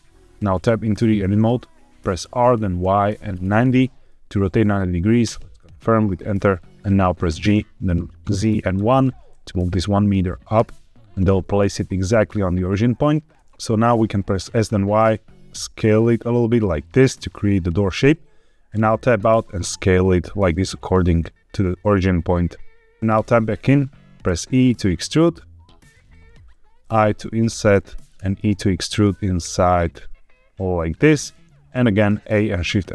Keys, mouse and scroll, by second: 0.4 Tab, 2.1 r, 2.7 y, 3.4 KP_9, 3.5 KP_0, 5.1 KP_Enter, 7.2 g, 8.1 z, 8.7 KP_1, 10.4 KP_Enter, 13.3 Escape, 13.3 s, 13.3 x, 14.3 s, 14.5 y, 17.0 click, 18.6 Tab, 19.1 s, 23.0 Tab, 23.0 click, 23.0-23.5 scroll up 1, 23.5 Tab, 24.2 e, 25.7 click, 26.3 i, 27.6 click, 28.1 e, 30.6 click, 32.0 a, 32.5 shift+n.